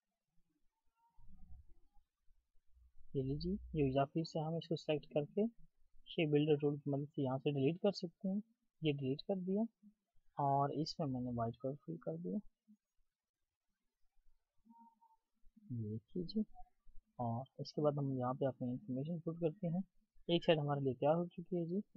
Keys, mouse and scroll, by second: 7.9 alt+click, 14.1 double click, 16.4 double click, 17.4-18.1 alt+scroll down 1, 18.4-20.8 ctrl+scroll down 1.